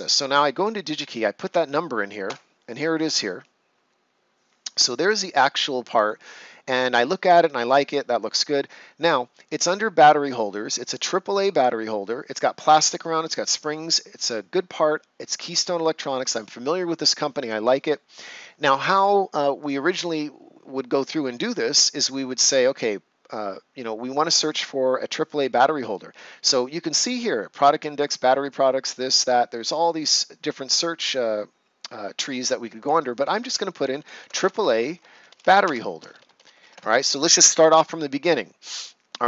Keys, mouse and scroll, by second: 8.1 scroll down 1, 15.6 click, 19.5 click, 20.9 scroll up 1, 32.7 click, 33.8-37.1 typing.